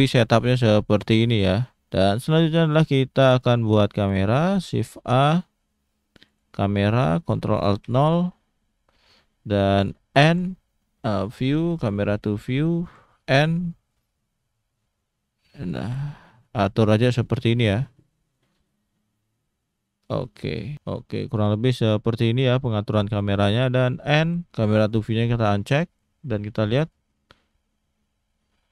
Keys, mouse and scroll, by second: 0.0-0.9 scroll down 1, 0.9 click, 1.5-1.8 scroll down 1, 1.8 scroll up 1, 2.1 shift+middle click, 2.5 scroll down 2, 3.4 click, 3.9-4.3 scroll up 2, 4.6 shift+a, 6.9-7.2 scroll up 1, 7.8 ctrl+alt+KP_0, 10.2 n, 11.1 click, 11.8 click, 12.8 n, 13.9 middle click, 15.0 shift+middle click, 15.1-15.5 scroll up 2, 15.6 shift+middle click, 16.1 scroll up 1, 16.4 shift+middle click, 18.6 shift+middle click, 21.7 shift+middle click, 24.2 n, 24.8 click, 25.7 n, 27.2 click.